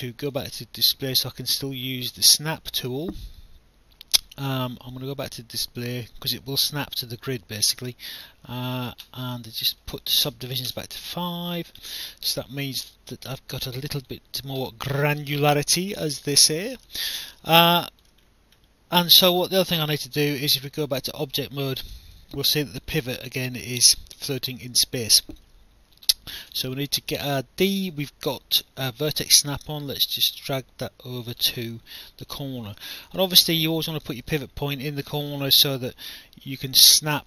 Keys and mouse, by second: 0.3 click, 8.6 click, 10.3-11.1 typing, 11.8 click, 13.9 click, 16.0 click, 17.3 alt+click, 19.4 alt+click, 20.6 right click, 22.4 alt+click, 23.2 alt+click, 24.7 alt+click, 26.5 d, 30.2 click, 31.6 alt+click, 33.9 alt+click.